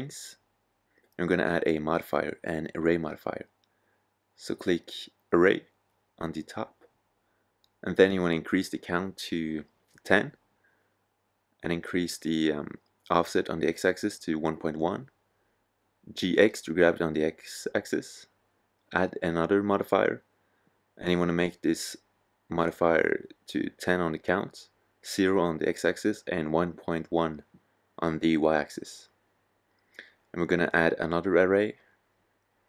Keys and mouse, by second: 13.3-14.3 drag, 14.3 g, 16.5 click, 21.1-23.6 drag.